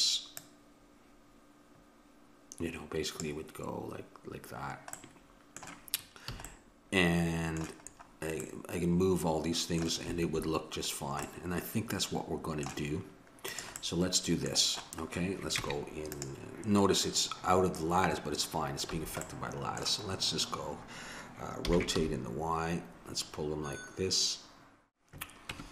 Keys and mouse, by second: 0.4-2.3 drag, 5.0-6.8 middle drag, 6.4 a, 7.9-9.3 middle drag, 13.5-15.3 drag, 15.6 Tab, 18.9 a, 21.7 r, 25.5 Tab.